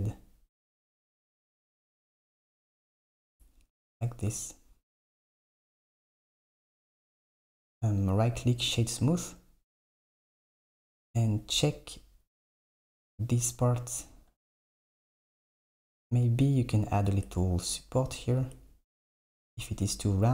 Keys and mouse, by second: 3.2 Tab, 7.7 click, 8.0-10.3 right drag, 17.3 Tab, 18.3 Tab, 18.6 Tab, 19.5 Tab, 19.9 Tab.